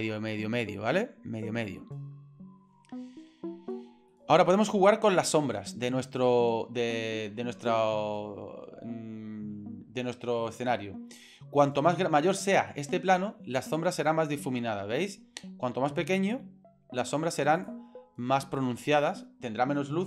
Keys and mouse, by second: 4.1 click, 5.1 click, 12.7 middle click, 15.7 s.